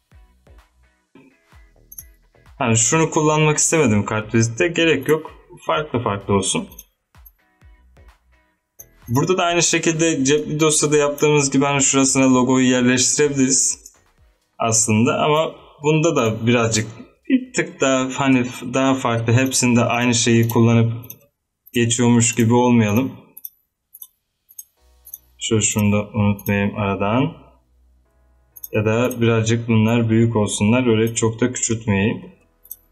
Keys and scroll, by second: 32.1 z.